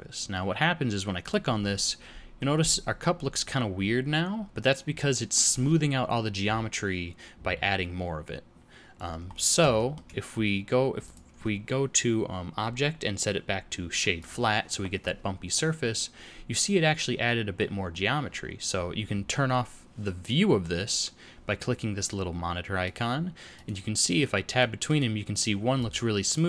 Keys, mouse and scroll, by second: 2.3 middle click, 9.3-9.7 scroll up 2, 9.7 shift+middle click, 11.0 click, 15.7 middle click, 17.9-18.8 scroll down 1, 22.8 click, 23.5 click, 24.0 click, 24.4 click, 24.8 click, 25.3 click, 25.7 click, 26.2 click.